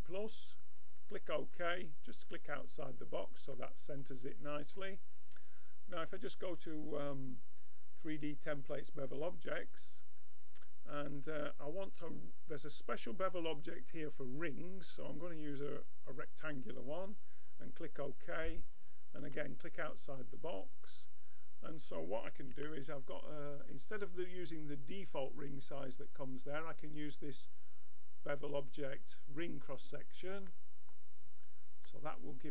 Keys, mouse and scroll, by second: 1.3-4.8 middle drag, 4.8-8.8 drag, 19.3-20.7 middle drag, 20.7-30.5 drag, 22.5 n.